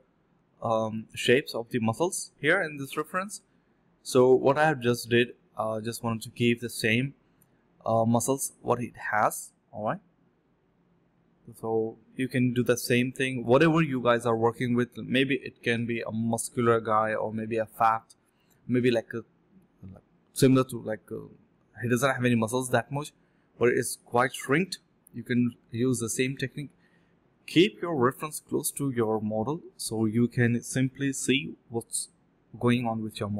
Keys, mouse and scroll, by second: 1.6 typing, 3.7 typing, 5.1 typing, 5.2 double click, 7.0 double click, 9.1 shift+click, 9.2 shift+double click, 9.3 shift+click, 10.8 alt+click, 11.0 alt+click, 11.1 alt+click, 11.7 double click, 12.2 alt+click, 12.5 ctrl+b, 12.8 double click, 15.2 shift+click, 15.3 shift+double click, 15.4 shift+click, 16.5 double click, 17.8 double click, 17.8 alt+click, 18.4 double click, 20.1 double click, 20.2 shift+click, 20.3 shift+double click, 20.4 shift+click, 21.6 double click, 22.1 shift+click, 22.2 shift+double click, 22.5 double click, 22.8 shift+click, 22.9 shift+double click, 23.0 shift+click, 23.7 alt+click, 23.9 alt+click, 24.9 alt+click, 26.8 double click, 27.3 shift+click, 27.4 shift+double click, 29.6 double click, 31.6 double click, 31.6 shift+click, 31.7 shift+double click, 31.8 shift+click, 33.2 shift+click, 33.3 shift+double click.